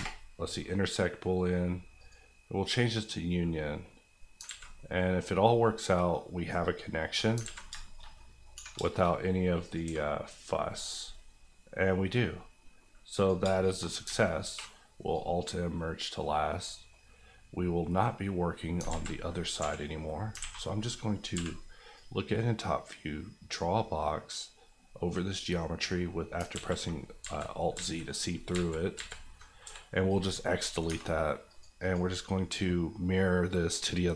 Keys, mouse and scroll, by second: 1.2 F9, 1.9 click, 4.1 middle click, 4.3 alt+middle click, 4.4 alt+z, 4.7 middle click, 5.3 scroll up 1, 5.6 middle click, 6.1 scroll up 1, 6.5 middle click, 7.4 alt+z, 7.7 shift+middle click, 8.0 middle click, 8.5 1, 8.8 shift+middle click, 9.1-9.6 scroll up 1, 9.6 click, 9.8 g, 10.7 right click, 11.1-11.5 scroll down 1, 11.5 middle click, 12.2 scroll down 1, 12.5 middle click, 13.1 click, 13.4 shift+click, 13.8 click, 14.0 alt+click, 14.4 alt+m, 15.1 click, 15.8 middle click, 16.2-17.7 scroll down 3, 16.6 middle click, 18.5-18.9 scroll up 2, 18.9 alt+z, 19.6 KP_7, 20.3 alt+KP_7, 20.4 alt+a, 20.8-21.3 scroll down 1, 21.3 b, 21.9-23.8 drag, 26.3 alt+click, 26.5 alt+x, 27.2 alt+z, 29.6 x, 30.0 click, 30.9 Tab, 31.5 click, 31.7 click, 33.7 click.